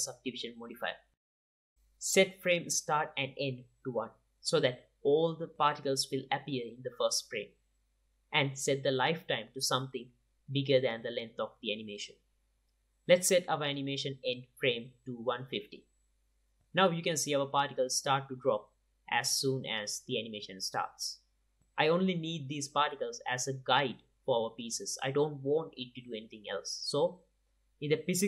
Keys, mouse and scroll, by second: 2.2-8.0 drag, 7.4 KP_0, 10.2-13.6 drag, 14.1-16.4 drag, 17.8-19.8 drag, 23.3-28.1 drag.